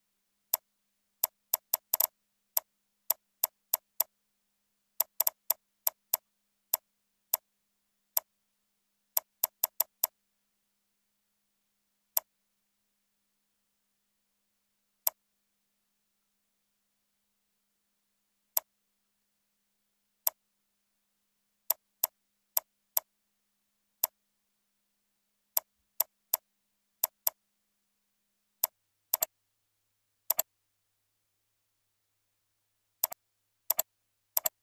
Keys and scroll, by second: 1.7 ctrl+c, 2.1 ctrl+v, 2.8 ctrl+e, 3.9 ctrl+c, 4.3 ctrl+a, 4.4 ctrl+v, 4.8 ctrl+e, 6.0 ctrl+c, 6.4 ctrl+v, 7.0 ctrl+e, 13.4 ctrl+Up, 13.9 ctrl+Down, 16.1 ctrl+Right, 16.5 ctrl+Left, 16.8 ctrl+Down, 34.3 ctrl+c.